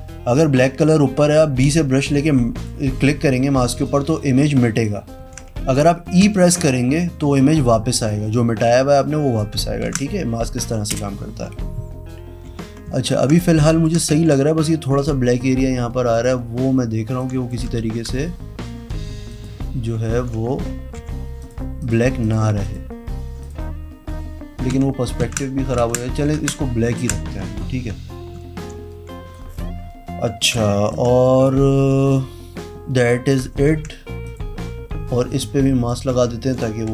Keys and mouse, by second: 1.6 b, 2.2 click, 3.8 click, 5.2 ctrl+z, 6.2 e, 7.3 click, 9.8 ctrl+z, 10.9 b, 12.4 v, 13.0 ctrl+alt+right click, 13.3 click, 14.1 ctrl+z, 16.1 click, 17.1 click, 17.8 ctrl+z, 18.9 e, 19.2 click, 20.1 ctrl+z, 20.9 b, 21.3 click, 21.7 click, 22.2 click, 22.5 click, 23.4 click, 24.7 ctrl+z, 25.2 ctrl+z, 26.3 ctrl+z, 26.9 ctrl+z, 28.6 b, 30.5 v, 30.8-33.3 shift+drag, 33.6 ctrl+z, 34.2 click, 35.8 click, 36.1-36.9 typing.